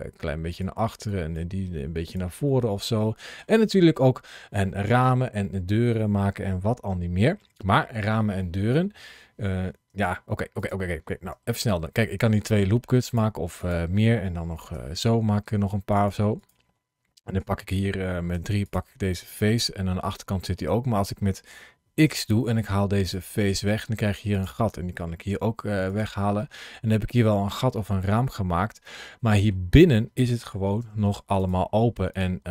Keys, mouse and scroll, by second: 0.3 click, 0.9 click, 1.4 g, 1.9 click, 2.3 middle click, 10.4 click, 11.3 ctrl+r, 13.4 click, 14.5 ctrl+r, 16.2 click, 17.1 click, 18.2 3, 18.5 click, 19.0 middle click, 20.8 scroll up 2, 21.8 x, 23.5 middle click, 24.2 click, 25.1 x, 26.2 middle click, 28.1 scroll up 2, 28.7 middle click, 30.6 1, 31.2 click, 32.0 shift+click.